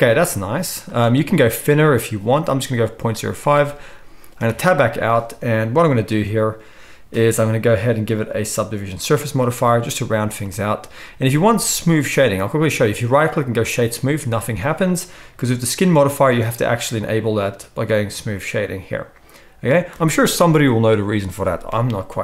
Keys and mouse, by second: 0.6 z, 4.5 Tab, 13.7-18.2 drag, 13.7-18.2 middle drag, 13.7-22.2 right drag.